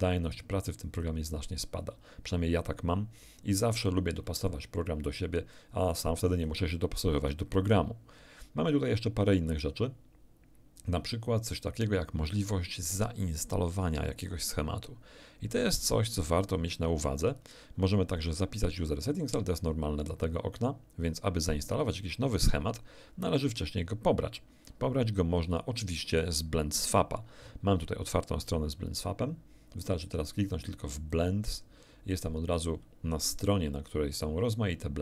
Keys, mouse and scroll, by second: 0.1 alt+click, 5.5 click, 28.4 click, 31.1 click, 34.6-35.0 scroll down 1.